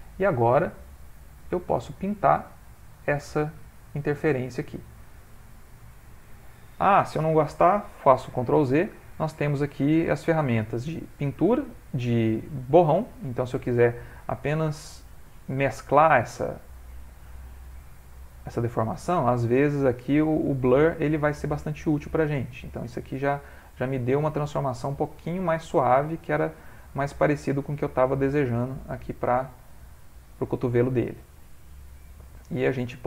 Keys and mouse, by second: 1.1 click, 3.7 click, 8.8 ctrl+z, 10.2 ctrl+z, 12.9 click, 14.2 click, 22.9 click, 25.2 click, 27.1 middle click, 28.5 click, 29.8 middle click, 30.1 middle click, 30.3 middle click, 30.5 ctrl+middle click, 31.9 middle click, 32.6 middle click, 32.7 shift+middle click.